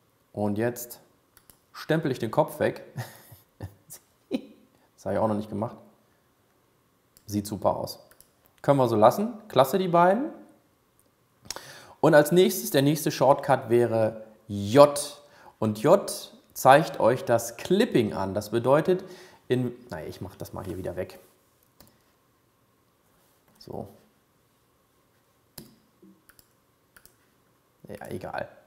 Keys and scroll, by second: 15.3 j.